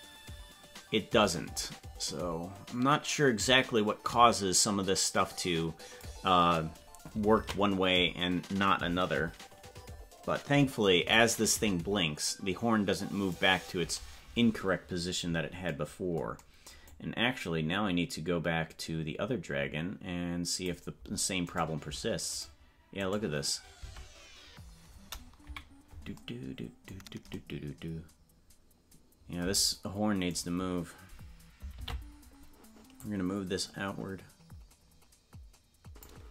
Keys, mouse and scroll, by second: 9.9 ctrl+s, 11.2-13.4 drag, 16.9-20.7 drag, 21.6 right click, 23.8 Tab, 25.4 KP_Decimal, 30.3-31.5 right drag, 31.7 ctrl+l, 33.0-36.0 drag.